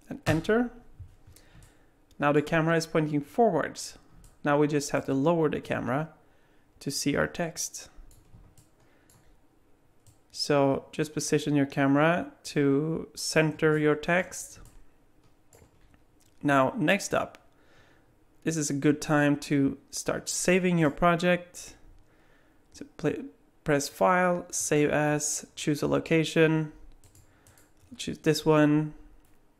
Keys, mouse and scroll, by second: 1.6 middle click, 4.2 middle click, 5.7 click, 8.6 alt+middle click, 10.1 click, 13.7 alt+middle click, 14.6 alt+middle click, 20.8 click.